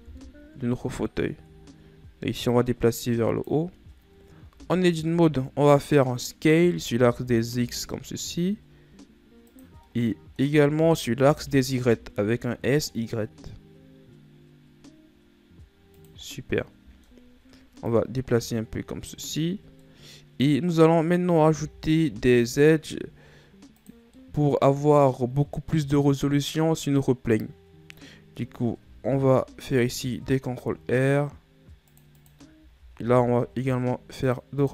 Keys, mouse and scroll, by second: 0.7 KP_1, 1.6-3.1 shift+scroll up 7, 3.1 click, 4.5 ctrl+scroll up 1, 5.1 Tab, 5.7 middle click, 6.6-7.3 scroll up 2, 7.3 s, 10.5-11.8 middle drag, 11.8 s, 16.9-18.5 middle drag, 18.5 click, 20.4-22.1 middle drag, 22.1 s, 24.8-27.8 middle drag, 28.0-29.4 middle drag, 29.4 ctrl+r, 33.4 ctrl+r.